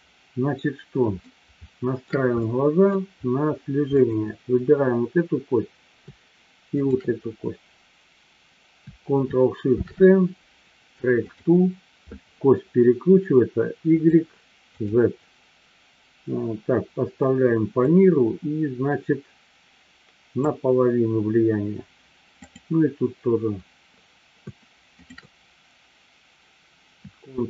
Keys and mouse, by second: 1.4-2.0 shift+middle drag, 2.5-2.9 middle drag, 3.9-5.6 drag, 6.7-8.4 shift+drag, 9.7 ctrl+shift+c, 15.0 drag, 18.0-20.5 drag, 22.4-24.1 drag, 24.9 shift+click.